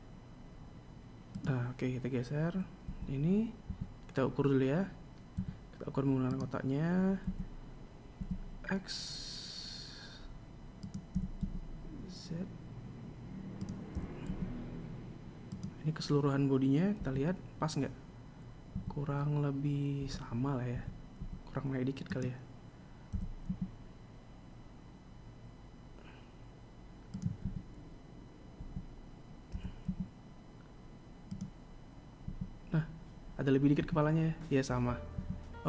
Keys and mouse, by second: 3.7 KP_3, 4.5 KP_1, 6.2 KP_1, 7.1 right click, 8.1 s, 12.0 s, 14.8 g, 17.8 KP_3, 19.6 KP_1, 20.9 KP_3, 21.6 KP_1, 22.0 KP_3, 22.9 right click, 23.9 g, 28.3 KP_1, 29.4 KP_3, 30.4 g, 33.1 KP_1, 34.7 KP_3.